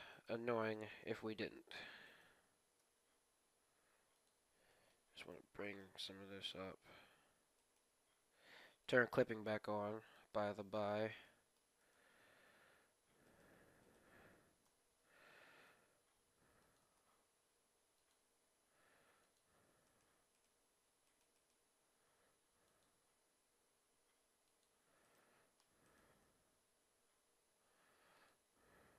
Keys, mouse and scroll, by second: 0.1-3.8 right drag, 1.6 ctrl+z, 2.7 g, 3.8 right click, 4.7-6.2 middle drag, 5.1-7.3 right drag, 6.3 g, 8.9-10.4 drag, 9.3 g, 10.3-12.8 middle drag, 11.7-15.5 right drag, 14.6 KP_3, 15.6 g, 16.8 g, 17.4 KP_3, 17.4 g, 18.4 g, 19.8-23.2 right drag, 20.5 g, 21.7 g, 22.9 g, 25.0-27.4 right drag, 26.7 g, 28.4 g, 28.8 r.